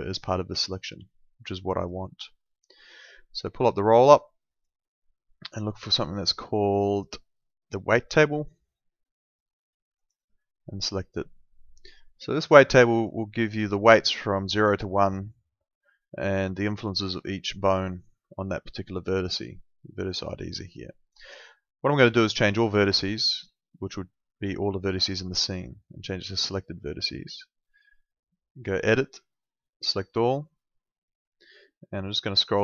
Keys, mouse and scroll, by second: 0.3 alt+middle click, 1.0 alt+middle click, 2.9 click, 5.5 click, 10.0 click, 12.7 click, 22.8 click, 26.4 click.